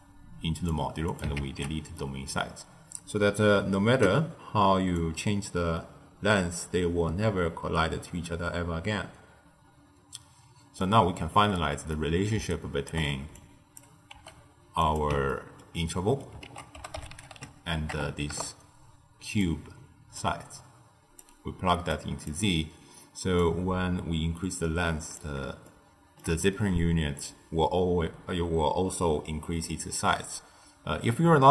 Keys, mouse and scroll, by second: 1.0 click, 1.3 ctrl+x, 1.9-4.9 middle drag, 4.9-7.9 drag, 11.2-11.9 scroll down 6, 11.9 middle click, 12.3 d, 12.4 right click, 12.8 d, 13.3 click, 14.0 g, 15.2-16.4 ctrl+middle drag, 16.4 ctrl+a, 20.1 drag, 21.9 click, 23.3-25.6 drag, 25.6-28.7 shift+middle drag, 30.1-31.2 middle drag, 31.2-31.5 scroll down 1.